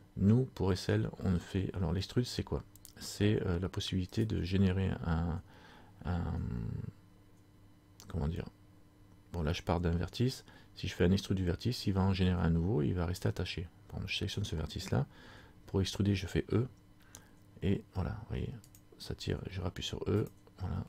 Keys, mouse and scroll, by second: 4.3 right click, 19.0 click, 19.3 e.